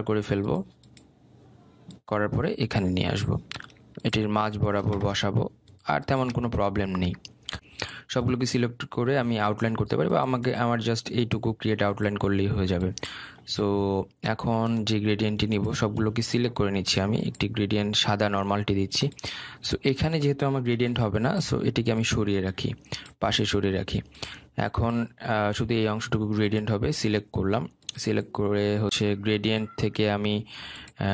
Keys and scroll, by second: 21.3 ctrl+z.